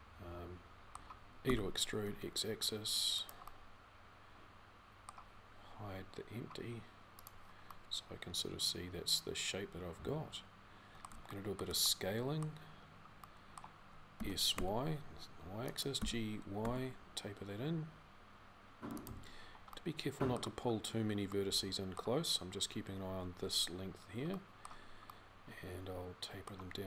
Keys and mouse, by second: 15.7 g.